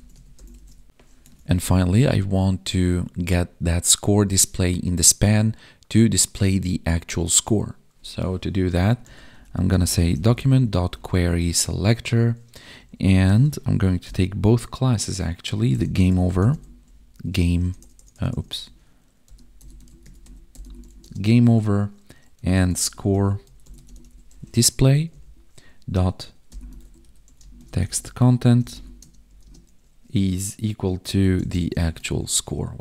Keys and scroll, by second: 0.0 ctrl+s, 0.1 Right, 0.6 ctrl+s, 1.2 ctrl+Tab, 7.2 ctrl+Tab, 11.3 Tab, 20.9 space, 24.8 Right, 28.9 space, 29.3 space, 32.0 ctrl+s.